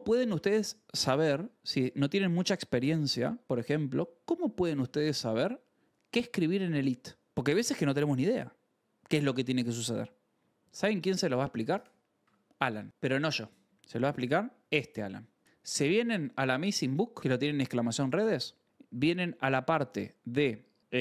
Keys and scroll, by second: 0.3 shift+v, 1.6 shift+4, 4.8 shift+5, 7.2 Escape, 11.9-13.4 typing, 13.7 Return.